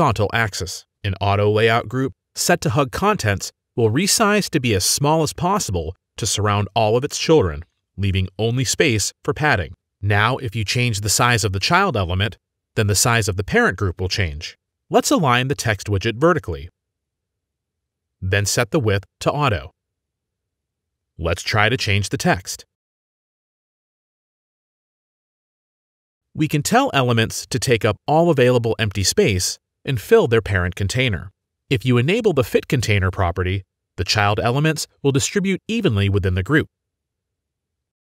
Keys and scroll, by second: 22.6 ctrl+a, 23.2 ctrl+c, 23.5 ctrl+v, 23.9 ctrl+v, 24.5 ctrl+v, 24.8 ctrl+v, 25.6 ctrl+z, 26.0 ctrl+z, 26.6 ctrl+z.